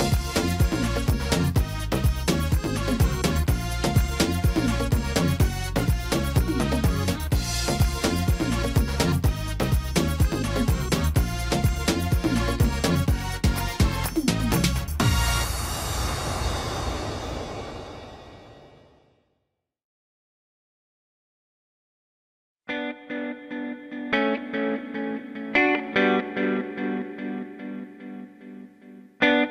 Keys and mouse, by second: 1.7-2.3 middle drag, 3.0-3.4 drag, 4.4 y, 5.7-6.6 drag, 8.1 s, 9.1 y, 13.0 s, 18.7 y, 19.0-28.7 drag, 28.7-29.5 middle drag.